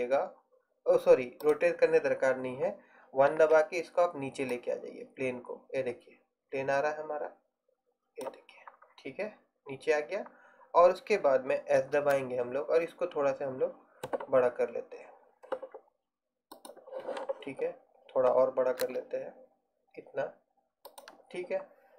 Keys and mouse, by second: 3.4 KP_1, 11.9 s, 18.9 s.